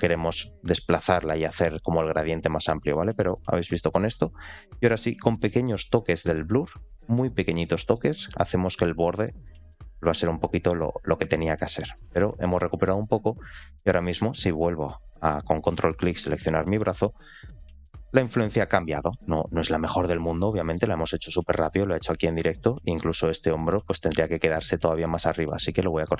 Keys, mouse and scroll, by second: 0.5-1.6 drag, 2.0 click, 2.5-2.8 scroll down 2, 2.8 middle click, 3.2 click, 3.7 click, 4.7 click, 5.1 middle click, 5.9 scroll up 1, 6.1 click, 6.3 click, 6.6 click, 6.8 click, 7.0 click, 7.3 click, 7.6 middle click, 8.0 click, 8.2 click, 8.5 click, 8.7 click, 9.0 middle click, 9.3 click, 9.6 click, 9.8 click, 10.3 click, 10.8 scroll down 1, 11.0 middle click, 11.4-11.7 scroll down 1, 11.7 middle click, 13.4 click, 13.9 shift+middle click, 15.7 ctrl+click, 16.1 shift+middle click, 16.8 r, 21.4 shift+middle click, 21.8-22.1 scroll up 1, 22.2 shift+middle click, 24.4 scroll up 2, 26.0 click.